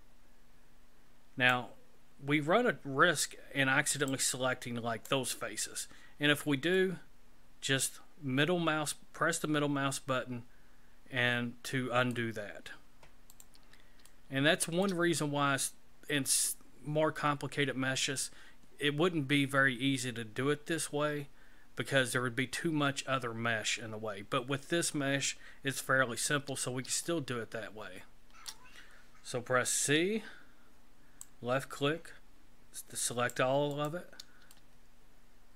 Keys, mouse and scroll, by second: 14.1 shift+middle click, 27.1 shift+middle click, 29.8 c, 34.5 shift+middle click.